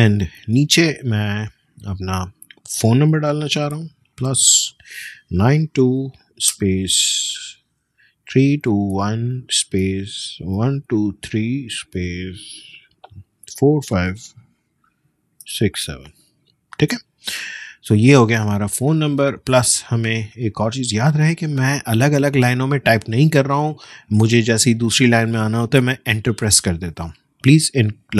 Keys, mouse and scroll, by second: 3.7 Return, 3.8 shift+=, 5.4-6.4 typing, 8.0-11.7 typing, 13.5 typing, 15.2-15.5 typing, 17.5 click, 24.2 Return.